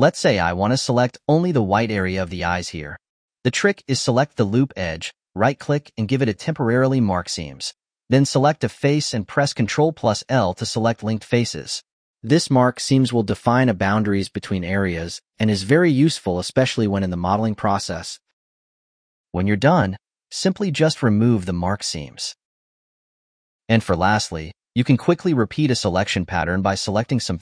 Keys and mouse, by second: 0.6 click, 0.9 h, 1.2 click, 1.6 Tab, 3.5 2, 3.7 2, 3.8 2, 4.4 alt+shift+click, 5.2-7.9 right drag, 8.3 3, 8.8 click, 10.2 ctrl+l, 11.6 ctrl+click, 12.2 ctrl+l, 12.9 2, 13.4 click, 13.7 alt+shift+click, 14.0-14.8 right drag, 15.2 3, 15.6 click, 16.1 ctrl+l, 16.7 ctrl+l, 17.0 click, 17.1 ctrl+l, 17.5 click, 17.8 ctrl+l, 18.6 2, 19.5 a, 20.6-23.1 right drag, 23.1 click, 23.1-25.9 ctrl+middle drag, 26.4 click.